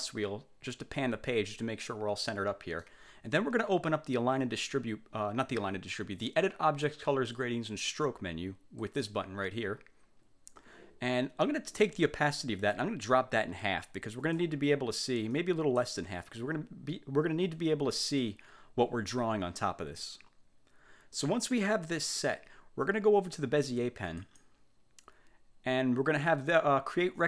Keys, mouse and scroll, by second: 9.0 click, 12.8-14.7 drag, 15.5 click, 21.3-22.5 middle drag, 24.3 click.